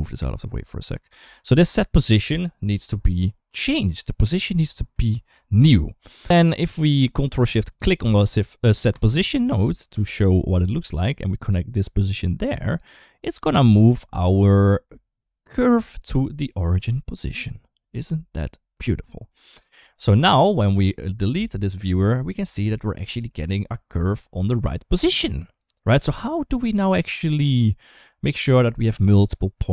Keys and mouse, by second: 1.1 shift+middle click, 4.7 middle click, 7.0 click, 7.5 click, 8.7 ctrl+shift+click, 9.8 shift+middle click, 11.6 click, 11.8 click, 13.5 shift+middle click, 14.2 shift+middle click, 20.0 middle click, 21.0 click, 21.2 ctrl+x, 21.9 shift+middle click, 22.3 middle click, 22.6 shift+middle click, 23.8 shift+middle click, 24.8 middle click, 25.4 click, 26.4 middle click.